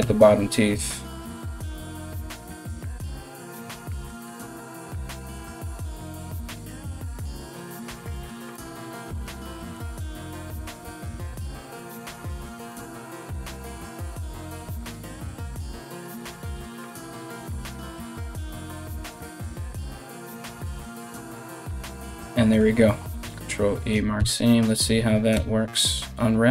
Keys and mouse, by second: 0.9 alt+right click, 2.0 shift+right click, 2.1-3.2 middle drag, 3.2 alt+shift+right click, 3.4-6.3 alt+shift+middle drag, 6.3 alt+shift+right click, 6.4 alt+shift+middle click, 7.0 alt+shift+right click, 7.1 alt+shift+middle click, 7.8 shift+right click, 7.9-11.4 shift+middle drag, 11.4 alt+shift+right click, 11.5-12.8 alt+shift+middle drag, 12.8 alt+shift+right click, 12.9-16.3 alt+shift+middle drag, 16.3 alt+shift+right click, 16.5-26.5 alt+shift+middle drag, 22.8 ctrl+e, 23.8 a, 25.0 u.